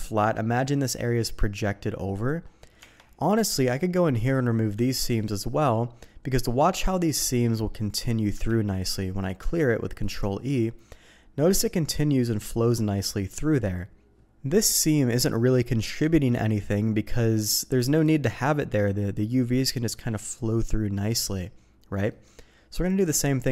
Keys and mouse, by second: 2.8 Tab, 3.4 click, 3.8 shift+middle click, 8.5 ctrl+e, 22.1 middle click.